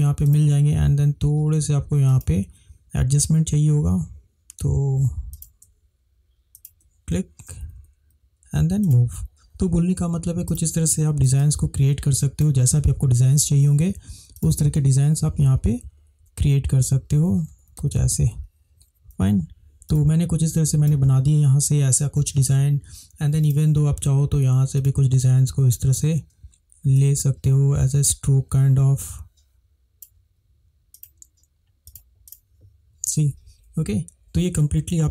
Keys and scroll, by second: 16.7 Up, 16.9 Up, 17.4 Left, 17.7 Left, 17.9 Left, 18.1 Left, 19.2 Right, 21.9 space.